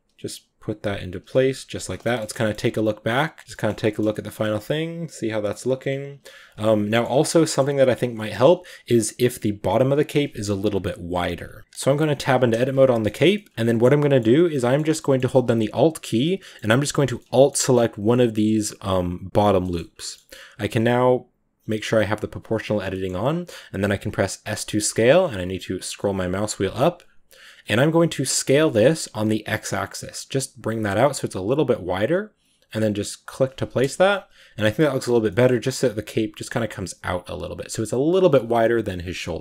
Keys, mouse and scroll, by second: 1.3-1.6 scroll down 6, 1.6 ctrl+s, 1.9-4.3 shift+middle drag, 4.3 ctrl+s, 6.6 z, 6.7 shift+middle drag, 6.9-7.3 scroll up 5, 7.3-7.8 shift+middle drag, 7.8 right drag, 8.0 shift+middle click, 8.2-8.6 scroll up 4, 11.6 click, 11.9 Tab, 12.9 shift+middle click, 13.0 scroll down 1, 13.1 a, 13.2 middle drag, 13.4-14.2 scroll up 9, 13.5 middle click, 14.0 middle click, 14.2 middle click, 15.0-15.3 scroll down 1, 15.9 alt+right click, 16.2-17.5 middle drag, 17.5-18.6 scroll up 1, 18.6-19.8 scroll down 5, 19.5 middle click, 19.8-22.3 middle drag, 22.3 click, 22.9 middle click, 23.6 s, 33.7 KP_0, 34.4 Tab, 35.1-39.2 shift+middle drag, 39.2 scroll down 2.